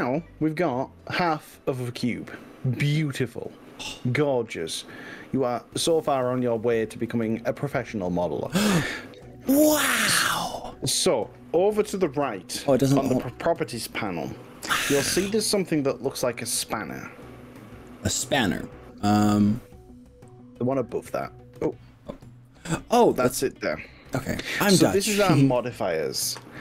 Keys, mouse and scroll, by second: 0.0-9.1 middle drag, 23.1 click.